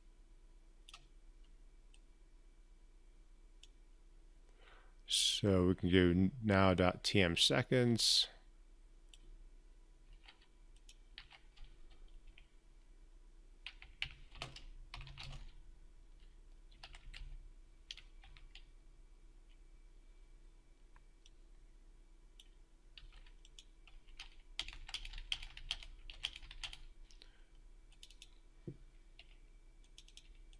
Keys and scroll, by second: 9.8 ctrl+c, 10.9 ctrl+v, 22.7 ctrl+c, 24.5 ctrl+v, 24.9 ctrl+v, 25.7 ctrl+v, 26.2 ctrl+v.